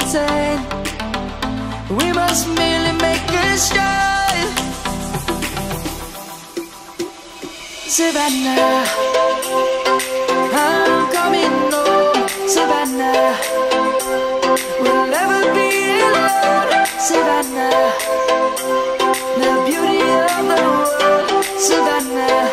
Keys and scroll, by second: 0.8 ctrl+z, 1.9 ctrl+z, 2.1 ctrl+z, 2.5 ctrl+z, 3.3 ctrl+z, 5.1 ctrl+z, 5.3 ctrl+z, 6.5 ctrl+z, 7.0 ctrl+z, 7.2 ctrl+z, 7.9 ctrl+z, 8.2 ctrl+z, 8.4 ctrl+z, 8.7 ctrl+z, 9.2 ctrl+z, 9.6 ctrl+z, 10.2 ctrl+z, 11.0 ctrl+z, 13.1 ctrl+s, 14.1 ctrl+z, 16.1 ctrl+z, 17.2 ctrl+z, 19.0 ctrl+s, 19.5 ctrl+z, 19.8 ctrl+z, 20.1 ctrl+z, 21.0 ctrl+z, 21.2 ctrl+z, 21.5 ctrl+z, 21.9 ctrl+z, 22.4 ctrl+z.